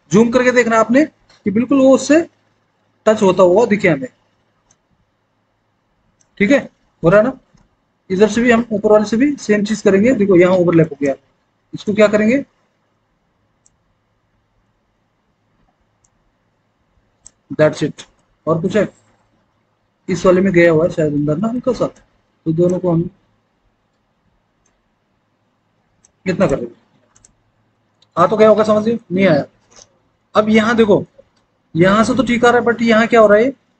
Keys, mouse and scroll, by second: 28.0 alt+w, 28.6 alt+w.